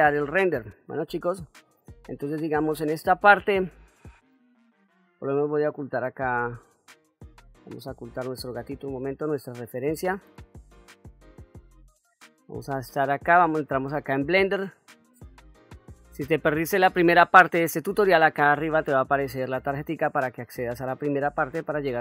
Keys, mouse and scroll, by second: 12.9-13.4 middle drag, 13.8-14.6 ctrl+middle drag, 15.0-15.6 shift+middle drag, 16.4 middle click, 21.0 middle click.